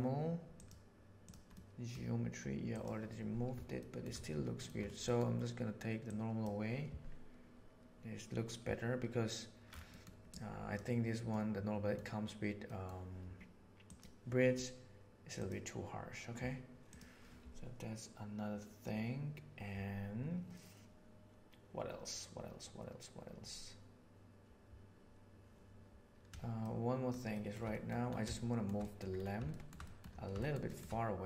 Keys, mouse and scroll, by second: 0.5 drag, 1.6 middle click, 2.7 click, 3.7 shift+middle drag, 6.0-6.3 drag, 9.8 middle click, 10.2 click, 11.3 middle click, 12.5 middle click, 12.7 click, 26.5-27.0 shift+middle drag, 27.3 shift+middle drag, 27.6 middle drag, 28.2-28.5 shift+middle drag, 28.7 middle drag, 29.4 shift+middle drag, 29.7 middle click, 30.3 shift+middle drag, 30.6 shift+middle click.